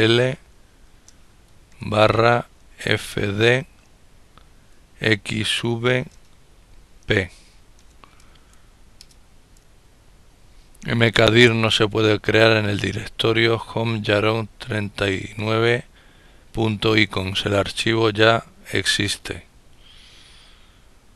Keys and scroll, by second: 4.6-5.1 typing, 7.4 typing, 8.6 Return.